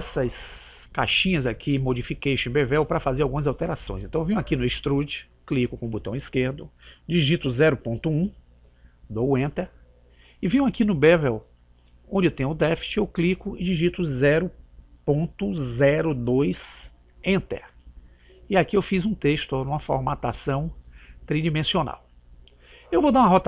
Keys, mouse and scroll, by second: 5.1 click, 12.8 click.